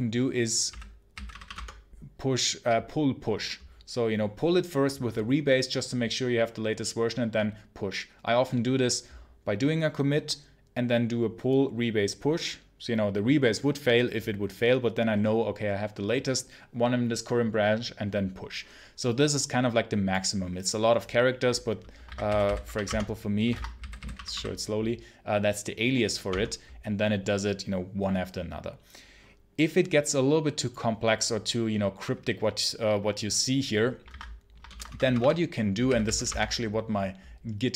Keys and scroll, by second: 0.3-1.7 typing, 21.9-24.0 typing, 23.4 ctrl+c, 26.1 space, 34.0 ctrl+c, 34.5 ctrl+l, 34.7 ctrl+Return, 35.7 g, 36.1 space.